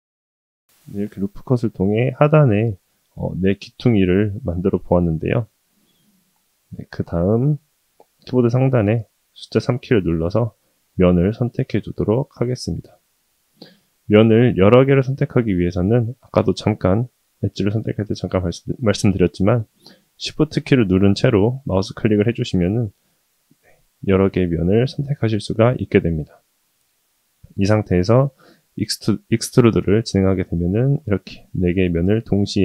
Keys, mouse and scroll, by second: 1.3-2.1 middle drag, 2.3-4.4 middle drag, 4.5-4.8 middle drag, 7.2 shift+middle drag, 11.3 3, 12.4 click, 13.5 click, 14.6 click, 15.5 click, 16.4 click, 22.6 shift+click, 23.8 shift+click, 24.8 shift+click, 25.6-27.9 middle drag, 28.0 middle click, 28.2 middle drag, 28.7-29.2 middle drag, 31.1 e.